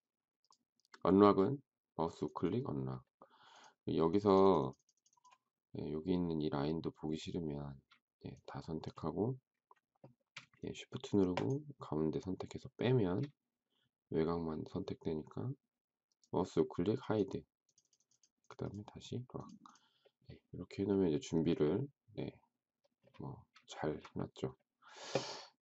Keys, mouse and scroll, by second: 11.3 shift+click, 23.7 shift+middle click.